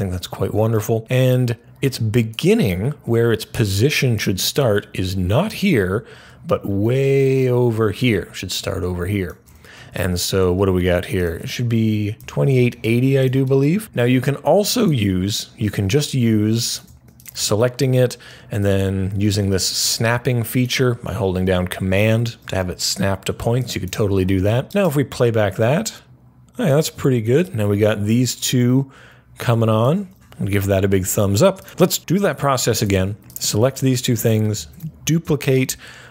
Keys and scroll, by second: 11.9-12.7 typing, 34.4 super+d.